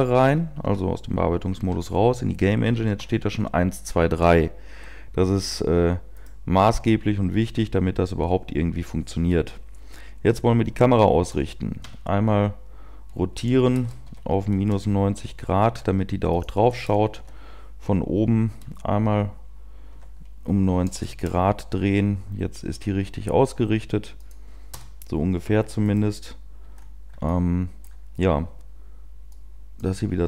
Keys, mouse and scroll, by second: 1.6 Tab, 3.7 p, 5.1-9.2 scroll down 1, 9.2 right click, 9.3 KP_1, 10.5-11.8 scroll down 1, 11.8-13.6 scroll down 1, 13.6 r, 15.6 g, 17.2 click, 17.2 KP_7, 20.7 r, 22.7 g, 24.7 click, 24.7 KP_0, 25.8 right click, 26.9-27.3 scroll up 2, 27.3 shift+middle click, 29.4 click.